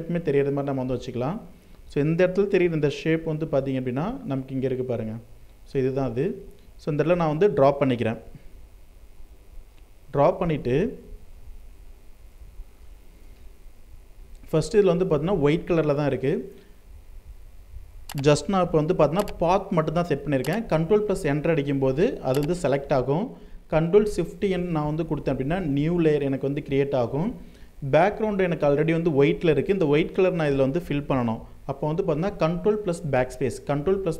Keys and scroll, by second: 10.7 ctrl+0, 11.9 ctrl+space, 20.2 ctrl+Return, 23.5 ctrl+shift+n, 25.6 ctrl+shift+n, 32.7 BackSpace.